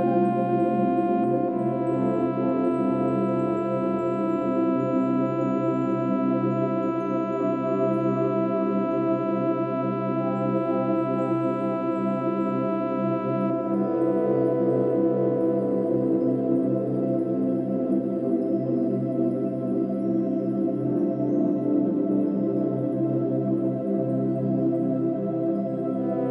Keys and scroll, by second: 7.7 ctrl+e, 8.0 ctrl+alt+g, 20.4 ctrl+alt+g, 26.0 ctrl+-.